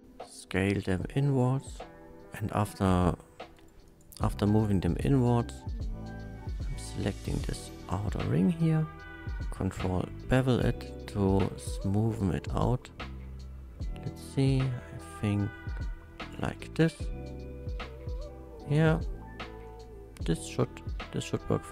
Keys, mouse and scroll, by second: 0.5 click, 1.0 Tab, 1.1-2.0 middle drag, 2.0 c, 3.5 right click, 3.9 click, 5.0 scroll up 1, 5.6-9.4 drag, 9.7 ctrl+b, 16.2 click, 16.4 Tab, 16.8-19.1 middle drag, 19.6-21.5 middle drag.